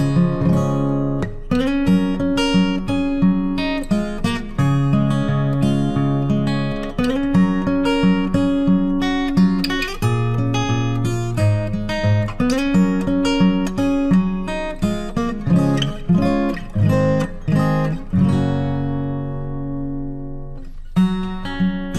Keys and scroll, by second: 2.9 ctrl+t, 19.4 ctrl+t.